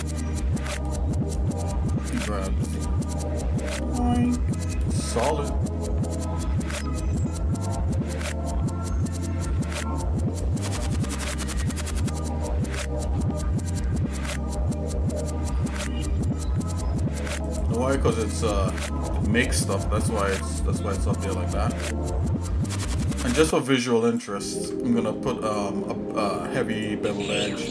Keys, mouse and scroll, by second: 0.3 shift+middle click, 2.1 g, 10.8-11.9 shift+middle drag, 13.0 g, 17.8 shift+middle click, 18.9 shift+middle click, 19.9 g, 24.5 ctrl+Tab, 25.8 middle click, 26.7 click, 27.5 alt+shift+click.